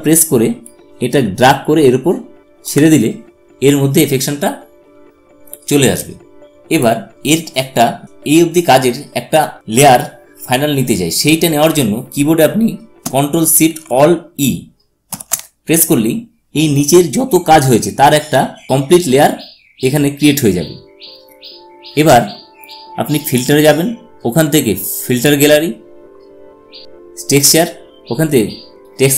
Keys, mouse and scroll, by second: 6.5 click, 14.8 ctrl+alt+shift+e, 23.0 click.